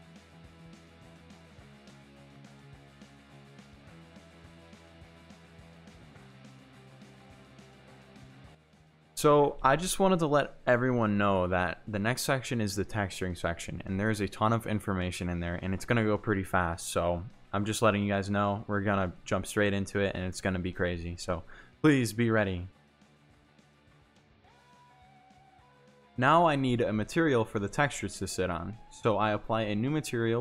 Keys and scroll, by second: 0.1 ctrl+z, 1.1 Tab, 1.3 ctrl+z, 1.5 Tab, 1.9 c, 2.7 g, 2.7 y, 2.8 x, 3.1 Tab, 3.3 ctrl+z, 4.4 Tab, 4.7-10.4 typing, 5.5 Tab, 6.4 Tab, 8.7 Tab, 8.8 Tab, 10.0 Tab, 10.6 Tab, 11.2 Tab, 11.9 g, 12.0 x, 12.3 Tab, 12.6 g, 12.7 x, 12.9 Tab, 13.7 Tab, 14.0-14.9 typing, 14.5 Tab, 15.1 Tab, 16.6 Tab, 17.7-19.5 typing, 18.1 Tab, 19.0 Tab, 19.4 Tab, 19.7 Tab, 22.3 Tab, 22.9 Tab.